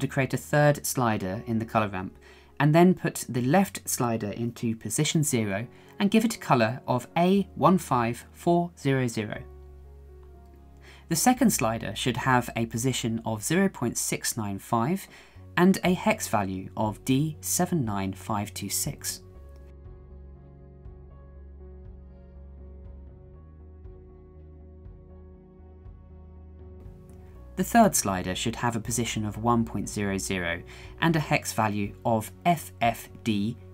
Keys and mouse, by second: 1.9 click, 9.6 0, 12.0 click, 14.6-18.6 drag, 19.1 click, 27.8 click, 28.5 click.